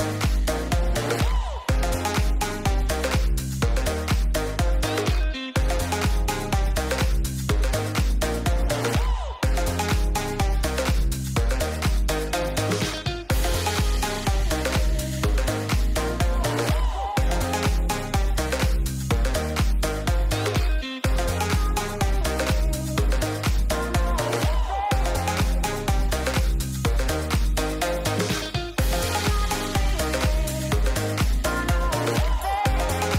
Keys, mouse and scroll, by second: 0.1 click, 1.5 click, 2.8 click, 4.3 click, 6.5 click, 8.2 click, 9.7 click, 11.9 shift+middle click, 13.9 shift+middle click, 15.3 click, 16.3 middle click, 17.6 click, 18.5 middle click, 18.9 shift+middle click, 19.1 middle click, 19.7 shift+middle click, 20.1 shift+middle click, 21.3 click, 21.8 ctrl+a, 22.1 ctrl+a, 22.3 ctrl+a, 22.5 ctrl+a, 23.3 click, 24.0 middle click, 24.4 click, 25.0 middle click, 26.1 click, 27.2 click, 28.0 click, 28.6 ctrl+a, 29.8 ctrl+a, 30.7 shift+middle click, 31.5 ctrl+s.